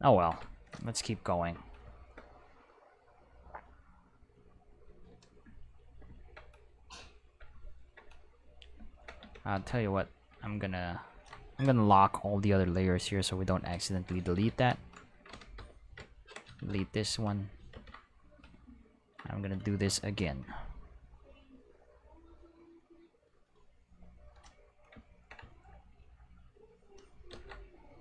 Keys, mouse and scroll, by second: 3.0-4.8 drag, 9.2 Tab, 9.5 a, 10.7-11.2 ctrl+middle drag, 12.1 click, 12.3 click, 12.9 click, 13.2 click, 13.9 ctrl+middle drag, 15.3 a, 15.6 x, 15.8 click, 16.6 ctrl+Tab, 17.0 click, 17.7 ctrl+Tab, 18.3 click, 21.3-24.2 drag, 26.4 click, 27.3 ctrl+z.